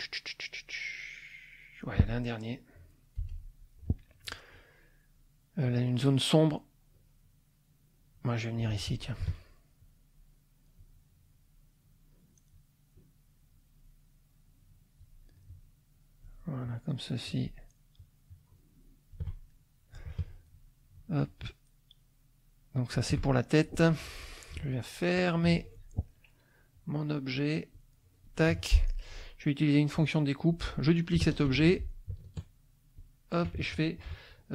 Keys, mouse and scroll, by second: 1.0-2.1 drag, 2.3 click, 3.2 F6, 3.5 click, 8.1 click, 9.8-12.7 shift+drag, 12.9-15.2 shift+drag, 15.4-16.4 shift+drag, 16.6-17.6 shift+drag, 17.9-19.3 shift+drag, 19.5 shift+middle click, 20.9-23.1 shift+drag, 23.6 shift+click, 25.1 click, 26.1 middle click, 27.7 click, 28.5 F2, 28.8 click, 30.0 click, 31.5 ctrl+d, 33.0 shift+click.